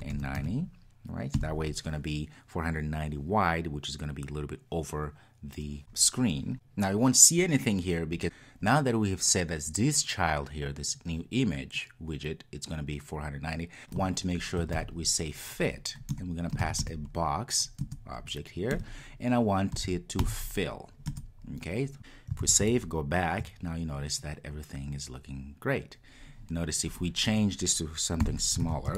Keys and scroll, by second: 6.5 super+s, 16.2 Return, 22.5 super+s, 28.7 super+s.